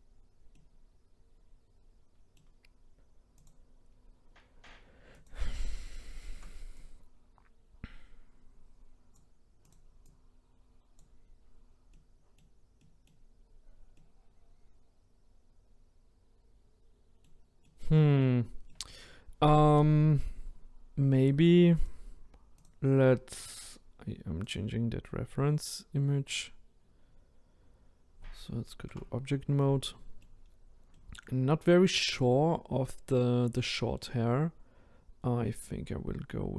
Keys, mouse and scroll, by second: 0.0-0.5 scroll down 2, 0.5-3.5 middle drag, 3.5 click, 3.9-5.3 scroll up 2, 5.3 click, 6.8 click, 10.1 click, 11.9-13.3 middle drag, 13.3-13.8 scroll down 2, 14.0-17.0 middle drag, 17.6-21.8 middle drag, 21.8 click, 22.6 click, 24.5 click, 28.9 Tab, 29.6-30.4 middle drag, 30.4-30.9 scroll up 1, 30.9-31.5 middle drag, 31.5-31.9 scroll down 2, 31.9-36.5 middle drag.